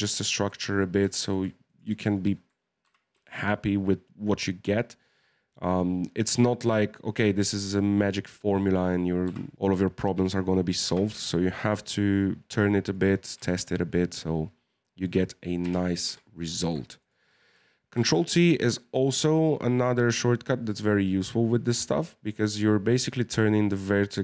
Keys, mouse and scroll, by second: 0.0 shift+scroll up 1, 0.1 shift+middle click, 0.8-1.1 scroll up 2, 1.1 shift+middle click, 1.6 right click, 2.1 shift+right click, 2.8 g, 7.3-9.2 middle drag, 9.2 g, 9.5 right click, 10.2 right click, 10.8 g, 13.3 Tab, 13.5-15.6 middle drag, 15.6 KP_1, 16.0 Tab, 16.6 shift+middle click, 17.0 right click, 17.9 ctrl+t.